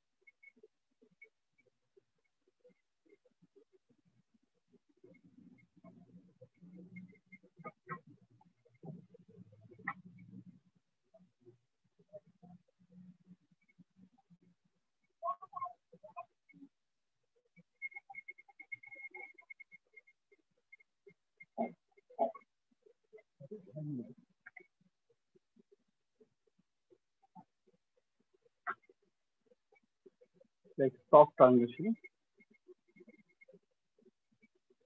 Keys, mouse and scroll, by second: 0.5 shift+click, 2.6 click, 3.6 click, 5.3 alt+click, 5.9 click, 7.8 click, 9.2 click, 10.0 click, 10.5 click, 10.6 click, 10.8 click, 10.9 click, 11.2 click, 11.6 click, 11.8 click, 12.0 click, 12.2 click, 12.4 click, 13.6 click, 13.8 click, 15.4 click, 17.4 shift+click, 18.8 click, 20.0 ], 20.4 click, 20.6-21.4 ], 23.0 ctrl+z, 25.2 ctrl+z, 26.2 shift+click, 27.3 alt+click, 29.3 shift+click, 30.2 shift+click, 31.2 alt+click, 33.2 alt+click.